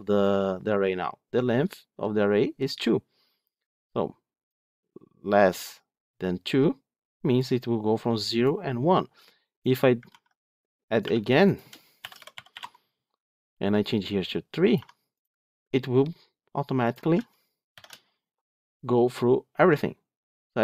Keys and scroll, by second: 10.0 ctrl+d, 17.6 ctrl+shift+F10.